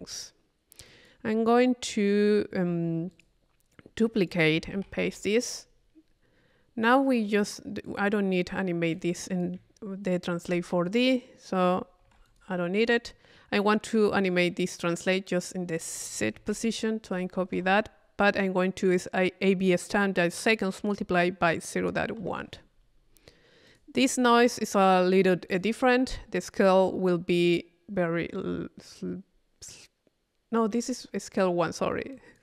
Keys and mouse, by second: 0.9-3.7 drag, 4.2 click, 4.7 c, 5.4 click, 7.8 click, 8.9-11.0 drag, 15.4-17.7 drag, 23.7 click, 25.5 click, 27.3 middle click, 30.7 middle click, 31.4-32.4 drag.